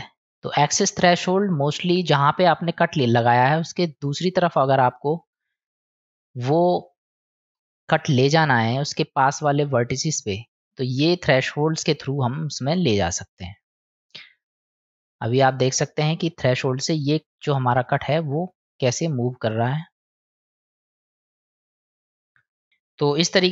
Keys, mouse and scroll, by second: 0.8-3.4 drag, 6.0-7.5 drag, 9.7-10.6 middle drag, 12.2-17.7 drag, 19.9-22.1 drag.